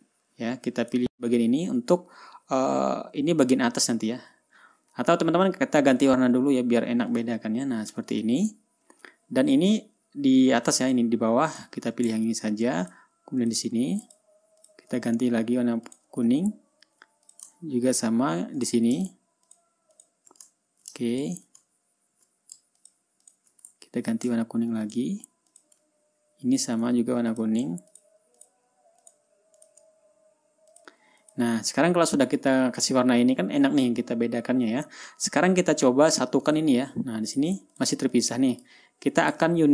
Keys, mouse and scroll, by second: 0.2 shift+click, 1.4 shift+click, 7.6 click, 8.3 click, 8.8 ctrl+scroll down 1, 9.3-9.6 ctrl+scroll up 1, 9.8 ctrl+scroll down 1, 11.6-12.0 scroll up 1, 12.0 click, 12.7 ctrl+scroll up 2, 13.4 ctrl+shift+click, 13.9 shift+click, 14.6 shift+click, 15.1 shift+click, 16.4 click, 16.8-17.2 ctrl+scroll down 2, 17.8 ctrl+click, 18.1 ctrl+scroll up 2, 19.1 click, 20.0 shift+click, 20.5 shift+click, 21.1 ctrl+shift+scroll up 3, 21.7 ctrl+shift+click, 22.2 ctrl+shift+scroll down 3, 22.5 ctrl+scroll up 2, 23.3 shift+click, 23.8 shift+click, 24.3 ctrl+shift+scroll down 2, 25.4 click, 26.0 click, 26.4 ctrl+scroll down 2, 26.7 ctrl+scroll up 2, 27.4 ctrl+scroll up 2, 27.8 ctrl+click, 28.4 shift+click, 28.9 shift+click, 29.5 shift+click, 30.1 shift+click, 31.2 click, 31.7 ctrl+click, 32.1 ctrl+scroll down 2, 34.1 ctrl+scroll up 2, 34.8-35.2 ctrl+scroll up 2, 35.5 ctrl+scroll down 2, 37.2 ctrl+scroll up 2, 37.8 ctrl+click, 38.3 ctrl+click, 38.7-39.3 ctrl+drag.